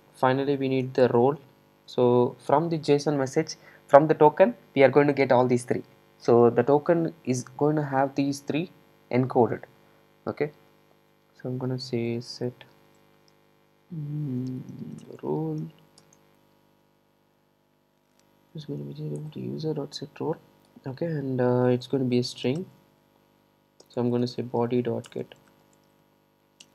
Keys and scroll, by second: 19.2 Return.